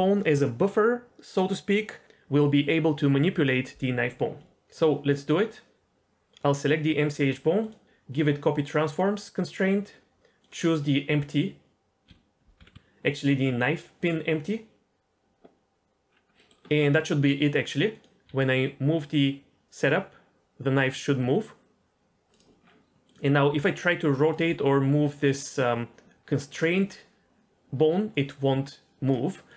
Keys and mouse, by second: 7.6-9.7 drag, 10.4-14.5 drag, 16.4 middle click, 16.7 middle click, 17.9 click, 18.3 g, 23.5 r, 24.5 g.